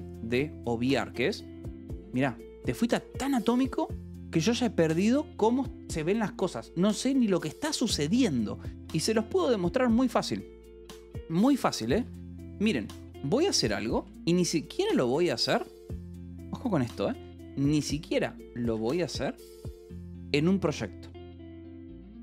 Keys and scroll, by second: 12.7 k, 13.3 j, 13.7 q, 13.9 Return, 16.8-19.3 typing, 21.2-22.2 typing.